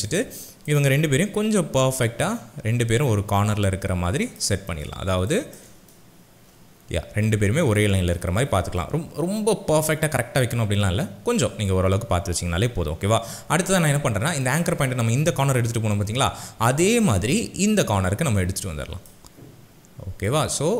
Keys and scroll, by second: 5.1 shift+space.